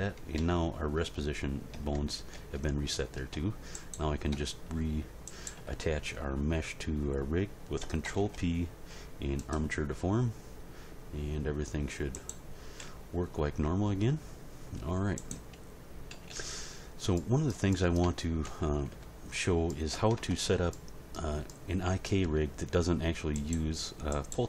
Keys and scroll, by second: 0.3 Tab, 1.7 Tab, 8.0 ctrl+p, 12.8 g, 16.1 a, 18.4 End, 18.9 Page_Down, 20.1 Tab.